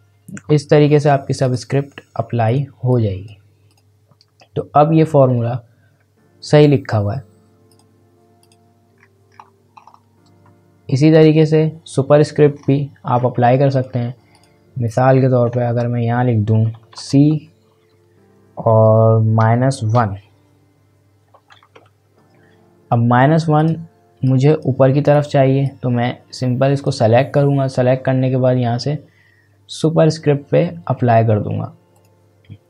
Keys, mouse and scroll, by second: 1.4 click, 5.2 scroll down 1, 6.0-7.7 scroll up 1, 7.7 click, 9.0-9.3 scroll down 1, 9.3-9.8 scroll up 1, 10.9 scroll down 1, 13.1-13.5 scroll up 1, 13.7 click, 15.7 Return, 17.0 shift+c, 19.7 typing, 21.7-22.4 typing, 23.6-29.1 drag, 31.9 click.